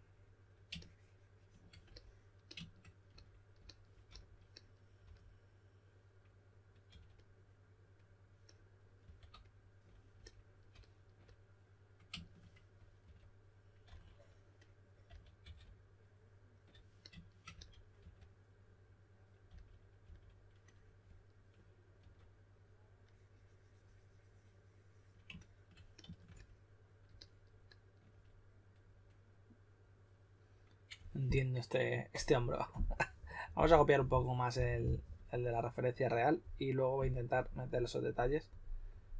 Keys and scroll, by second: 4.0-5.0 typing, 6.8 typing, 9.0 typing, 13.0-13.8 typing, 15.0-15.4 typing, 17.5-18.0 typing, 19.4-20.0 typing, 21.9 typing.